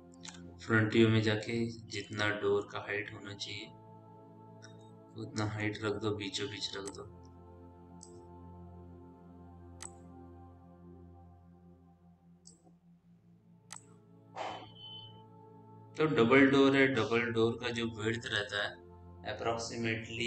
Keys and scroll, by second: 0.1 f, 8.9 r, 13.4 w.